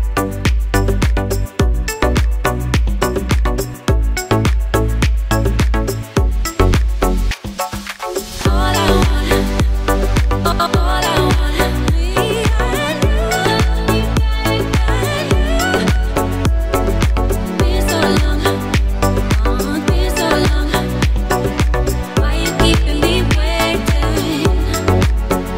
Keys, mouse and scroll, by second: 3.0 click.